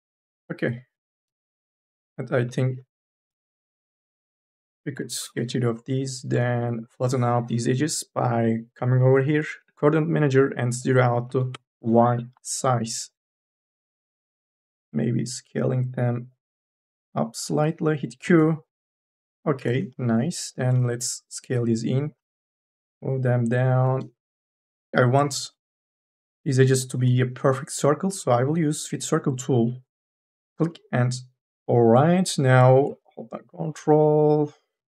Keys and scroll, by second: 0.0 n, 1.3 q, 3.2 3, 3.9 2, 4.1 e, 4.8 Delete, 11.1 KP_0, 11.4 Return, 14.7 t, 17.7 q, 19.7 q, 22.2 e, 24.3 ctrl+z, 32.0 t, 33.7 e.